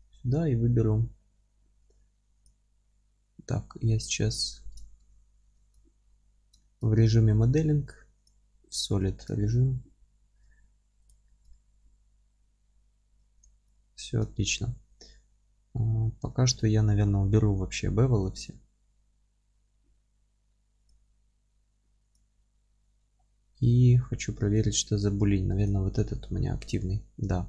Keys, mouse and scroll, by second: 2.5-3.6 drag, 3.6-8.2 middle drag, 5.0 ctrl+space, 6.4 scroll up 2, 8.2 click, 8.8-11.1 alt+middle drag, 9.1-9.4 scroll down 2, 9.4 alt+z, 11.1 click, 11.3-13.4 alt+middle drag, 13.4 click, 13.8-23.1 alt+middle drag, 14.3-15.0 scroll up 2, 15.0-15.9 scroll up 1, 15.9-16.3 scroll down 1, 17.9-20.9 scroll up 1, 23.1-23.7 scroll down 1, 23.7-25.7 alt+middle drag, 24.2 scroll up 1, 24.7 scroll up 1, 25.7 click, 26.3 g.